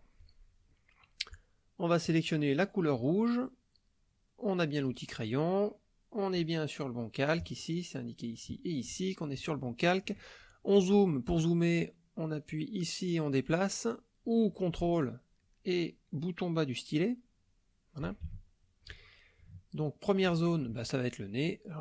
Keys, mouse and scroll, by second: 2.0 click, 3.0 click, 6.4 click, 9.6 shift+click, 12.8-14.4 drag, 17.2 ctrl+click, 18.3 ctrl+shift+click, 19.5 shift+click, 21.4-21.8 drag.